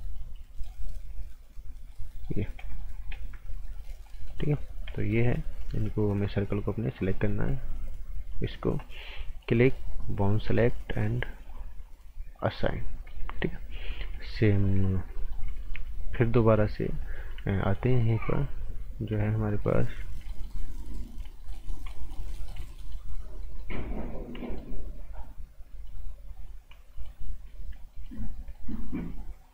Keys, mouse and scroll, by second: 0.5 right click, 1.5-1.9 scroll up 1, 1.9 right click, 2.3 scroll up 1, 2.6 right click, 2.9 scroll down 1, 3.1 right click, 4.4 scroll up 1, 4.9 right click, 5.6 scroll up 1, 7.0 click, 12.9 scroll down 1, 13.1 right click, 13.9 scroll up 1, 14.9 scroll down 1, 15.1 right click, 15.6 alt+right click, 16.5-17.4 scroll up 1, 17.6 alt+right click, 19.5 alt+right click, 20.3 alt+right click, 21.4 right click, 21.7 scroll down 1, 21.9 right click, 22.8 right click, 25.2 scroll up 1, 25.7 right click, 26.9 right click, 27.3-27.7 scroll up 1, 27.9 right click, 28.2 scroll up 1, 28.5 right click.